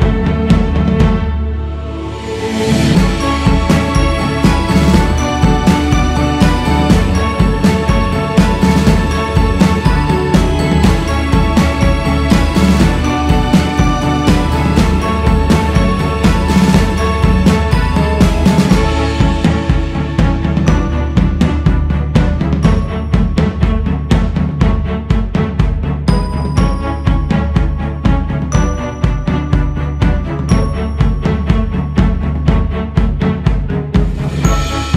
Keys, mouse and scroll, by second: 0.7 click, 2.8 l, 3.9 h, 5.3 ctrl+Tab, 19.1-19.5 scroll up 5, 20.6 alt+shift+z, 24.9-27.8 drag, 28.1-31.1 drag, 32.7-34.9 drag.